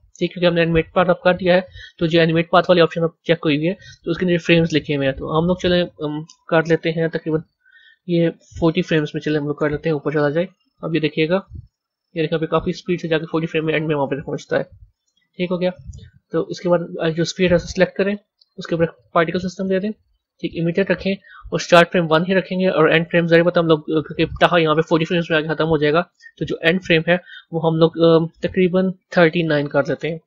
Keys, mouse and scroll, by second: 1.0 click, 1.6-3.1 scroll down 3, 3.1 click, 4.8-7.9 drag, 11.5-13.4 drag, 15.1-16.7 drag, 18.2 click, 19.1-22.1 drag, 22.6-25.6 drag.